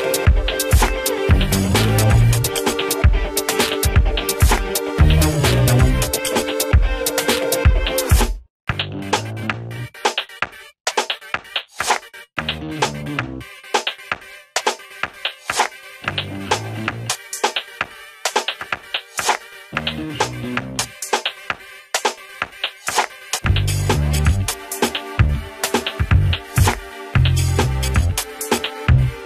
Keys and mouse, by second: 0.5 ctrl+o, 1.7-12.7 drag, 24.2 ctrl+Num_Lock, 24.2 click, 29.1 click.